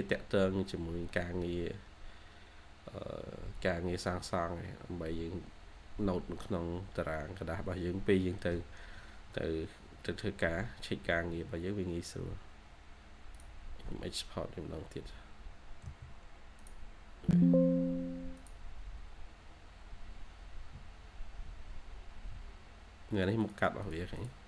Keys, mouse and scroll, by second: 15.7 typing, 23.7 double click.